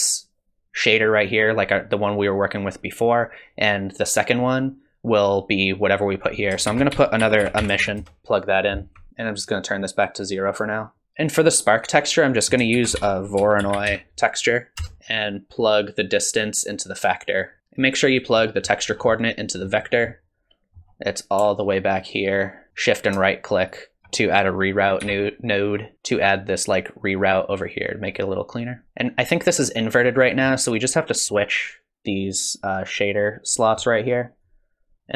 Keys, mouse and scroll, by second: 3.7 click, 6.1 click, 6.7 shift+a, 7.8 s, 8.2 alt+right click, 9.1 click, 12.3 click, 12.7 shift+a, 15.5 click, 17.6 middle click, 17.6-18.4 scroll down 4, 18.4 middle click, 18.9 scroll down 2, 19.1 middle click, 19.8-20.5 scroll down 3, 20.1 middle click, 22.0 alt+right click, 23.2 shift+right click, 25.0 g, 28.8 middle click, 28.8-30.1 scroll up 10, 30.2 middle click, 31.2 click, 34.4 click, 35.0 click.